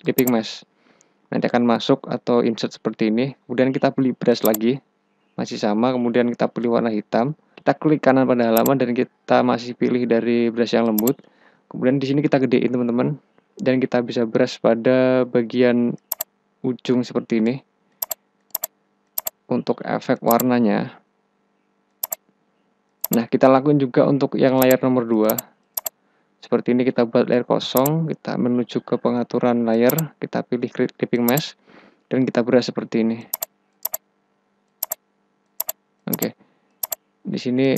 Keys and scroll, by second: 12.1 ], 14.7 [.